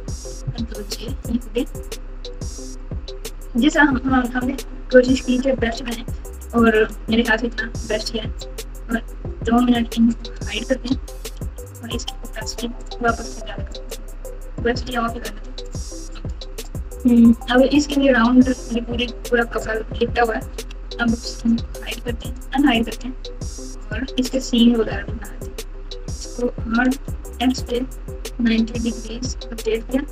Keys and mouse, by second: 0.6 ctrl+j, 2.3 click, 3.2-5.7 typing, 6.4 KP_Subtract, 6.7 KP_Subtract, 6.8 KP_Subtract, 10.5 shift+click, 11.4 h, 11.6 click, 13.7 click, 14.2 click, 15.5 click, 20.5 Tab, 22.2 click, 23.8 click, 24.8 KP_7, 26.2 r.